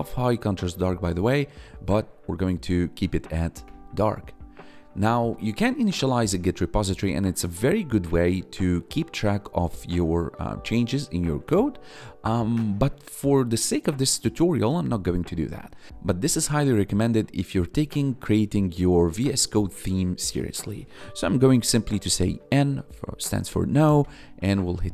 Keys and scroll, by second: 0.3 Up, 1.5 Up, 3.6 Return, 21.9 n, 24.0 Return.